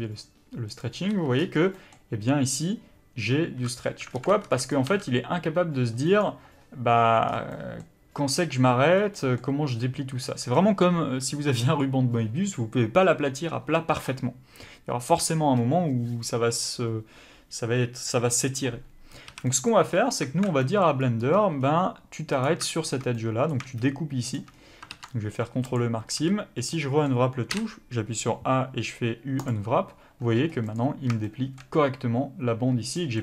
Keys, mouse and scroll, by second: 4.1 alt+a, 4.7 b, 4.9 g, 6.2 right click, 10.3 middle click, 19.3 a, 19.5 middle click, 19.9-20.3 scroll up 2, 20.3 alt+a, 20.6 middle click, 21.0 scroll up 1, 21.6-22.3 scroll down 1, 22.3 click, 23.1 middle click, 24.3 shift+click, 24.5-25.7 scroll down 1, 25.7 ctrl+e, 26.1-26.8 scroll down 2, 26.2 a, 26.8 middle click, 29.6 u, 30.7 click.